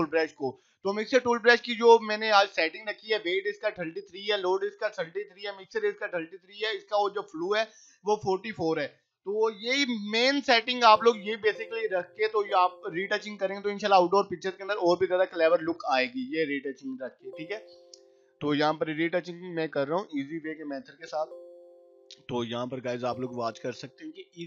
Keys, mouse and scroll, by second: 10.6 [, 11.2 ], 12.1 [, 12.9-14.1 drag, 16.9 ], 17.3-20.9 drag, 20.7 [, 20.9 [, 21.0-22.6 drag, 22.6 ], 22.8 ], 23.0-24.4 drag.